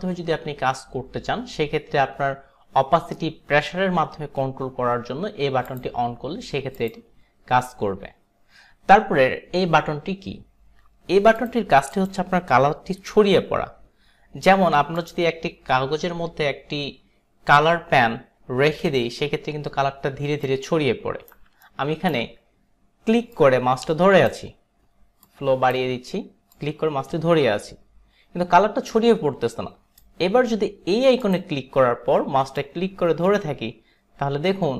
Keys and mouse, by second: 5.7 click, 6.8 click, 11.4 click, 12.0 click, 13.1 Delete, 15.1 click, 20.5 alt+right click, 21.8 alt+right click, 23.4 click, 25.3 click, 26.6 click, 31.3 click, 32.7 click.